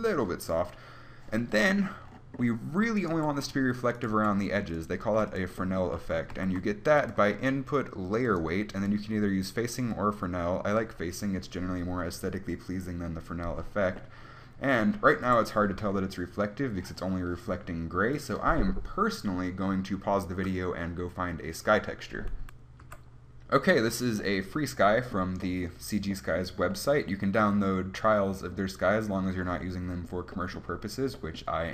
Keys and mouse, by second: 3.2-6.6 right drag, 3.4 g, 4.4 g, 6.6 click, 6.6 shift+a, 9.1-12.2 drag, 14.2 middle click, 15.6 KP_1, 27.6 middle click, 27.8 middle click.